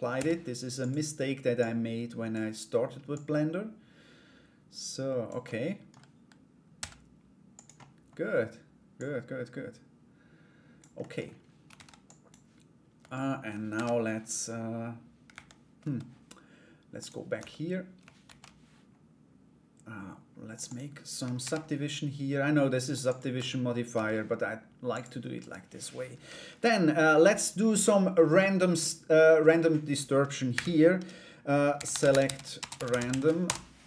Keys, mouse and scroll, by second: 1.1 click, 2.7-5.0 drag, 5.0 middle click, 7.3 middle click, 8.5-10.3 drag, 10.6 middle click, 10.8-11.3 scroll down 1, 11.3 ctrl+a, 12.5 Tab, 13.3 ctrl+r, 15.4 Tab, 16.5 click, 17.8 ctrl+r, 21.0 ctrl+r, 22.9 Tab, 24.5 click, 25.0 right click.